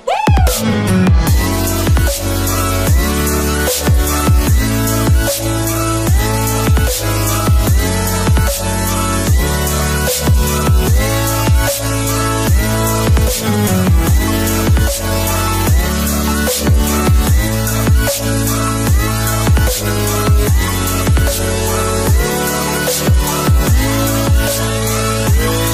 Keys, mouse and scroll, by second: 6.2 click, 7.5-8.8 alt+shift+click, 14.1 click, 17.1 click, 24.3 click.